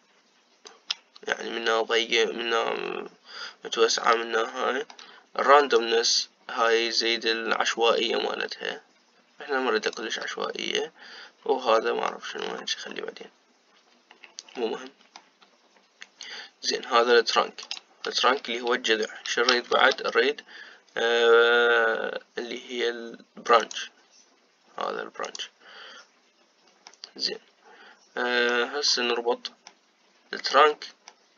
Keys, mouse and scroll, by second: 5.2-6.5 shift+middle drag, 6.5-12.5 shift+drag, 12.5 middle click, 13.3-15.3 scroll down 8, 15.3-17.1 middle drag, 17.1 click, 18.5 click, 20.4 shift+a, 27.6-29.9 middle drag, 29.9-30.4 scroll down 4, 30.4-31.3 middle drag.